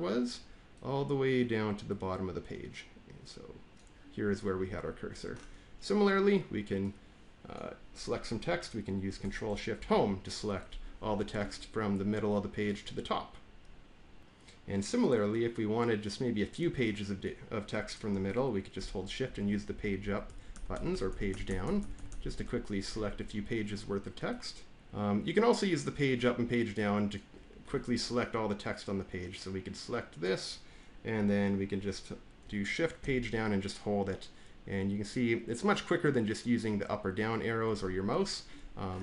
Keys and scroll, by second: 9.7 ctrl+shift+Home, 19.1 Page_Up, 19.9 Page_Up, 20.2 Page_Up, 20.4 Page_Up, 20.6 Page_Up, 20.8 Page_Up, 21.0 Page_Up, 21.2 Page_Up, 21.4 Page_Up, 21.5 Page_Up, 21.7 Page_Up, 21.9 Page_Up, 22.0 Page_Up, 22.1 Page_Up, 32.9-37.5 Page_Down.